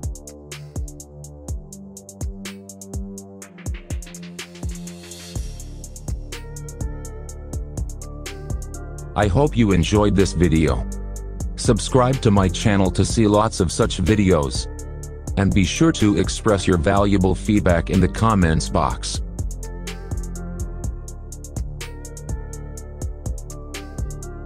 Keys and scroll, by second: 0.0-0.3 typing, 23.0 ctrl+z.